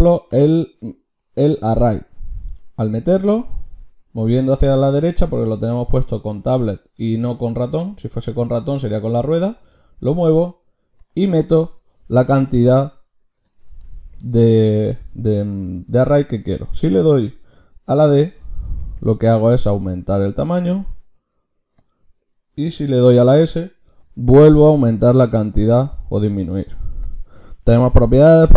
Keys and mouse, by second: 22.8-25.2 drag.